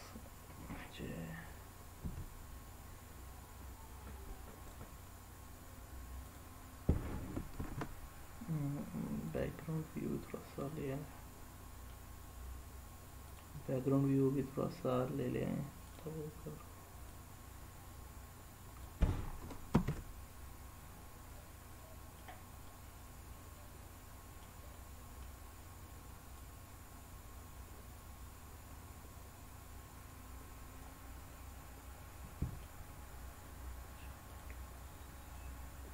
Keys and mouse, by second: 1.9 s, 4.7 click, 7.5 shift+a, 10.6-11.9 middle drag, 13.2 click, 15.8 click, 17.0-18.8 drag, 19.7 ctrl+z, 21.3 middle click, 22.7-24.4 middle drag, 24.7 middle click, 26.3-30.8 drag, 31.3-32.6 middle drag, 34.3 drag, 35.3-35.9 drag.